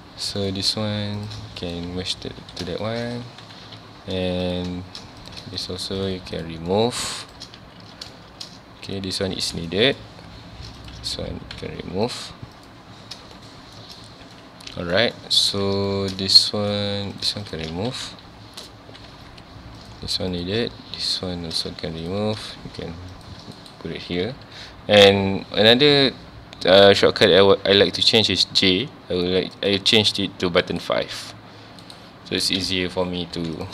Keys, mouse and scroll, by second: 0.4 click, 1.2 shift+click, 2.4 alt+a, 2.8-3.2 shift+middle drag, 3.2 ctrl+s, 3.6 2, 4.4 click, 5.2 click, 5.6 shift+click, 6.0 shift+click, 6.3 shift+click, 6.7-7.2 shift+middle drag, 7.2 shift+click, 7.6 ctrl+x, 7.9 scroll down 1, 8.1-8.5 shift+middle drag, 8.5 scroll up 1, 9.7-10.1 shift+middle drag, 10.1-10.8 scroll up 1, 10.8 click, 11.1 ctrl+x, 11.7 1, 12.1 click, 12.6 click, 13.3-16.8 shift+middle drag, 16.8 2, 17.1 click, 17.4 shift+click, 17.7 ctrl+x, 18.1 1, 19.1 2, 19.8 click, 20.3 click, 21.2 ctrl+x, 21.7 1, 22.0 click, 23.1 shift+click, 25.0-31.8 right drag, 33.3 2, 33.6 click.